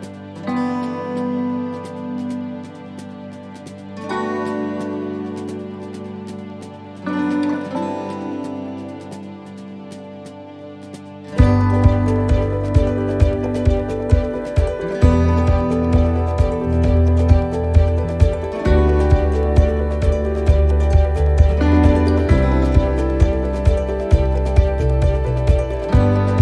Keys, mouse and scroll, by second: 1.3 alt+s, 6.5 alt+s, 9.8 middle click, 10.9 shift+middle click, 11.4-12.5 scroll up 4, 13.1 alt+shift+right click, 14.3 ctrl+z, 15.0 alt+shift+right click, 17.6 alt+shift+right click, 22.5 middle click, 23.0 scroll down 2, 23.4 shift+middle click, 25.9 click.